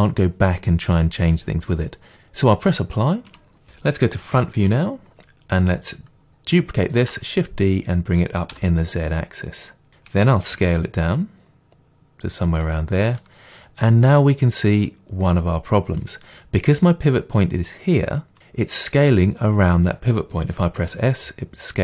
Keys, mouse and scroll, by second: 3.3 click, 4.3 KP_1, 7.0 shift+d, 9.9 click, 10.6 s, 12.7 click, 13.2-21.8 middle drag, 20.6 s.